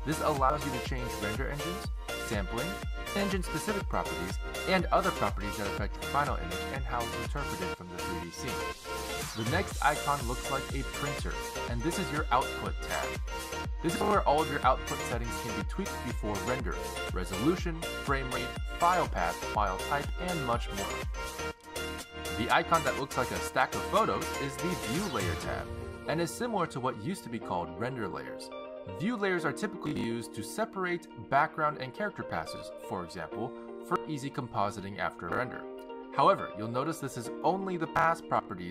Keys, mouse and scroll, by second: 12.4 click, 17.1-18.1 scroll down 5, 18.1 scroll down 1, 25.1 click, 30.8 click, 31.4 click.